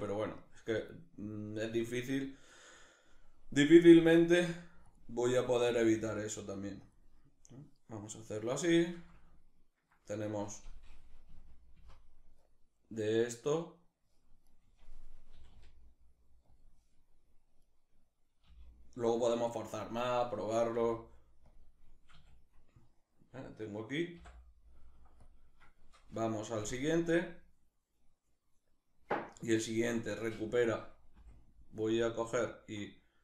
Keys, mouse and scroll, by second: 0.0-2.1 shift+middle drag, 2.1-3.4 right drag, 3.4 r, 4.6 click, 4.9 right click, 5.3 r, 6.5 click, 8.3-14.1 shift+middle drag, 10.9 Left, 11.4 Right, 14.1 right click, 14.9 r, 16.2 click, 17.2 click, 17.3 right click, 18.1 g, 19.5 click, 20.3 g, 21.1 click, 21.7 a, 26.2 Right, 30.8 Left.